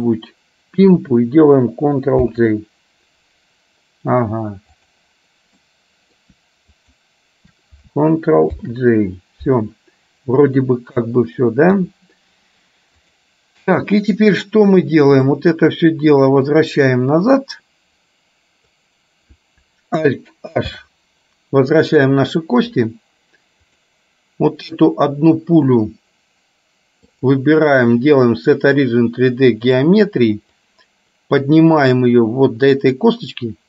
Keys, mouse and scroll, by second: 2.2 ctrl+j, 4.9 click, 5.7 middle click, 6.9 shift+click, 8.7 ctrl+j, 11.8 KP_3, 13.0 click, 15.3 click, 16.5-18.9 drag, 20.8 alt+h, 23.8 click, 27.3-29.9 drag, 30.8-33.2 drag.